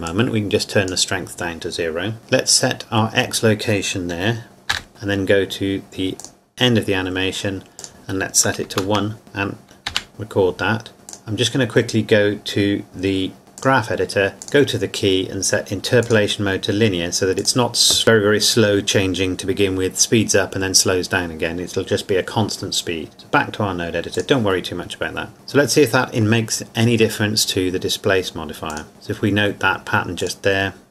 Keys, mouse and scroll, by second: 0.1 click, 6.2 click, 8.7 KP_1, 8.9 KP_Enter, 11.1 click, 13.6 click, 23.1 click, 28.7 click, 30.2 click.